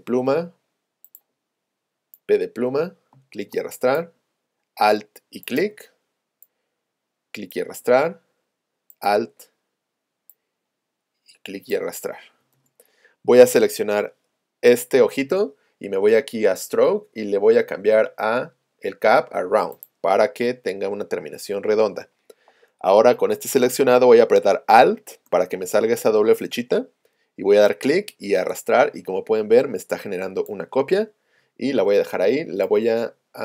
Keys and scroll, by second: 3.1 space.